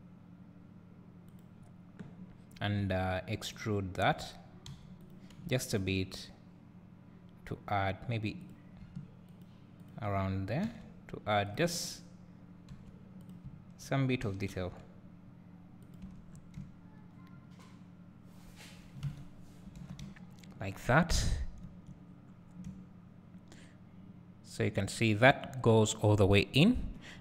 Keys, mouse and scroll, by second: 3.6 click, 4.9 3, 5.1 click, 8.5 click, 9.6 shift+click, 10.9 e, 11.8 1, 12.9 2, 13.3 click, 14.6 g, 16.3 Tab, 16.4-16.8 scroll down 1, 16.8 `, 19.2 a, 19.5-20.2 scroll down 2, 20.2 `, 21.3-21.7 scroll up 2, 21.7 `, 22.2-23.0 scroll down 2, 23.0 `, 26.5-26.9 scroll down 2, 26.9 KP_7.